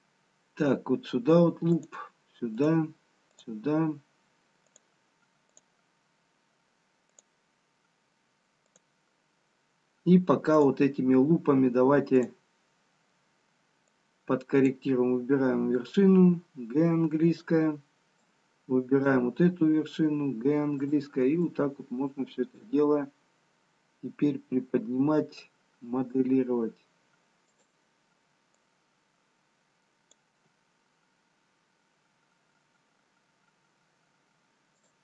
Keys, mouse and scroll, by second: 1.7 click, 2.5 click, 13.9 click, 15.4 g, 19.9 click, 21.5 click, 22.8 g, 28.7 click, 30.4 g.